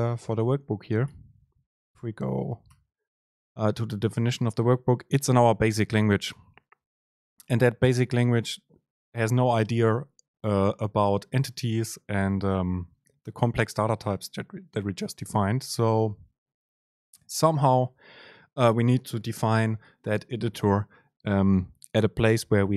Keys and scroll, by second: 1.2 ctrl+alt+shift+s, 2.6 alt+F1.